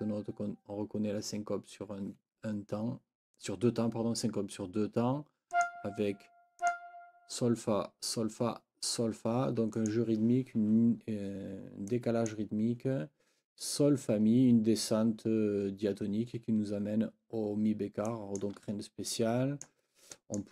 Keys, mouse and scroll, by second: 5.5 click, 6.6 click, 9.8 click, 11.9 click, 12.0-12.3 scroll up 2, 12.1 click, 12.3 click, 18.1-18.6 scroll up 1, 20.1 click, 20.3 click.